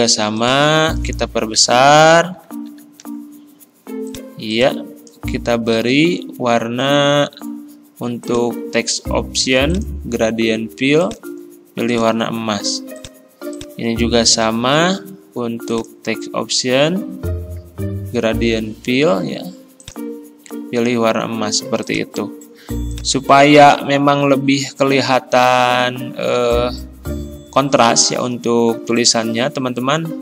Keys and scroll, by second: 1.6 ctrl+].